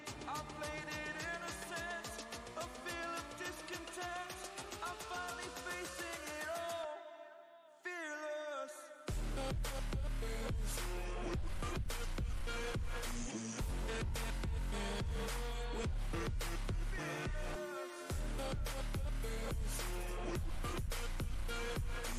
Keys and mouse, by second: 0.3 alt+click, 4.8 ctrl+space, 4.9-5.5 ctrl+click, 5.3 ctrl+space, 6.6-8.2 alt+drag, 16.4 click, 17.6-22.1 alt+drag.